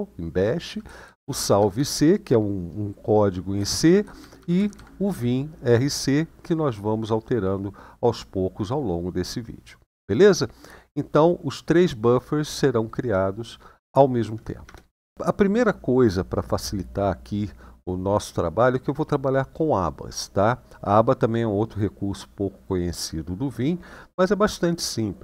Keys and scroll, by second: 0.4 Right, 0.8 Right, 0.9 Right, 1.1 Right, 1.3 Right, 1.5 Right, 3.3 Right, 3.5 Right, 3.8 Right, 3.9 Right, 4.3 Right, 4.5 Right, 14.4 Return.